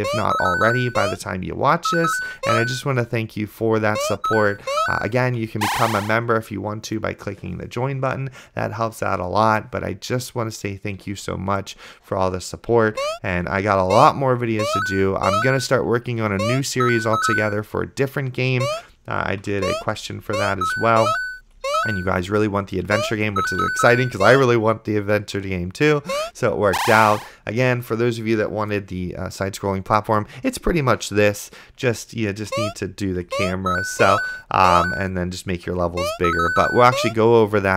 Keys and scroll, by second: 0.0-0.3 typing, 2.3 a, 2.7 space, 3.1 d, 4.2 space, 5.0 d, 5.5 a, 11.3 d, 13.2 space, 14.1 space, 15.6 a, 16.6 space, 17.1 d, 17.5 a, 18.8 space, 20.0 a, 20.4 space, 22.2-24.4 typing, 32.0 d, 32.8 space, 32.9 a, 33.4 space, 35.3 d, 36.2 space.